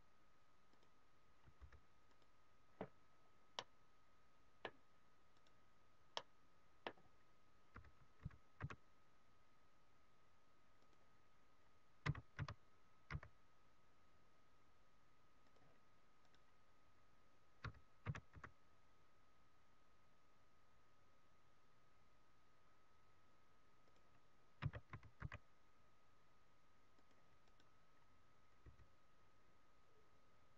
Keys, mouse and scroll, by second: 0.6 click, 3.1-3.6 scroll down 1, 3.6 middle click, 5.7 right click, 6.1 middle click, 7.7 r, 11.0 click, 11.2 scroll down 2, 12.0 s, 15.6 click, 16.5 right click, 17.6 r, 24.1 click, 24.8 s, 27.1 click, 27.6 right click, 28.6 g.